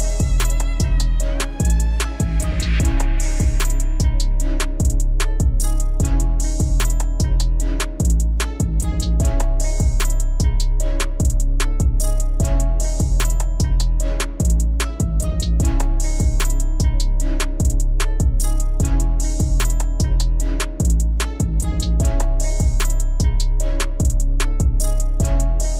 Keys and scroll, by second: 11.6 alt+w.